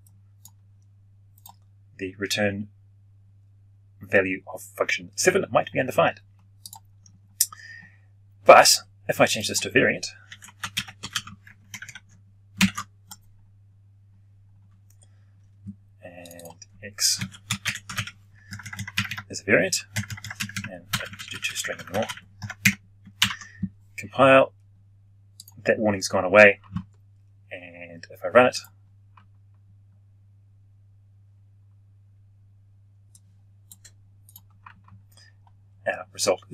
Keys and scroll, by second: 12.5 ctrl+alt+shift+p, 23.1 ctrl+F9.